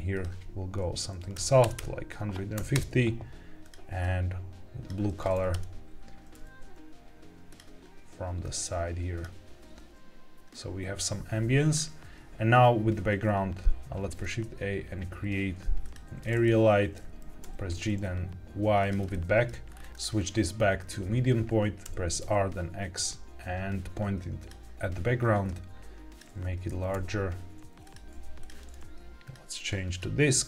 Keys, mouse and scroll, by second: 0.0-2.7 drag, 1.7 KP_0, 3.5 click, 5.4 KP_0, 6.3 r, 7.4 click, 8.3 click, 11.6-13.8 scroll down 2, 13.9 shift+a, 16.4-16.9 middle drag, 17.1 g, 17.3 y, 18.7 click, 19.0-19.4 shift+middle drag, 19.6 scroll down 2, 19.9-20.8 drag, 21.8 r, 22.1 x, 24.3 click, 25.4 click, 26.6 g, 26.9 y, 27.8 click, 27.9 g, 28.0 z, 28.3 click, 29.1-29.9 drag.